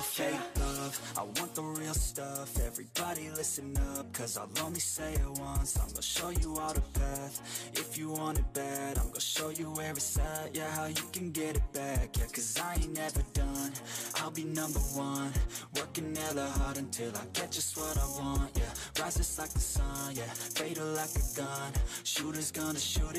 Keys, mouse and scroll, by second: 0.0-1.1 drag, 1.4 s, 2.6-3.1 scroll down 8, 3.1 click, 3.4 click, 3.9 click, 4.2 Tab, 4.4 click, 4.6 middle drag, 4.8 scroll up 3, 4.9-5.8 middle drag, 5.8 click, 6.1 Tab, 6.5-9.8 typing, 7.5 click, 8.5 scroll down 5, 8.6 shift+middle click, 11.0-11.4 scroll up 3, 11.2 shift+middle click, 11.8 KP_3, 12.1 shift+middle drag, 12.3 scroll up 1, 12.7 r, 13.0 g, 14.1 r, 14.5 scroll up 1, 14.8 drag, 15.5 e, 16.3 ctrl+z, 16.7-17.1 drag, 17.7 e, 17.9 click, 18.1 s, 20.0 ctrl+r, 21.4 drag, 22.0 click, 22.2 scroll down 5, 22.4 click, 22.7 a, 22.9 3, 23.0-23.1 right drag.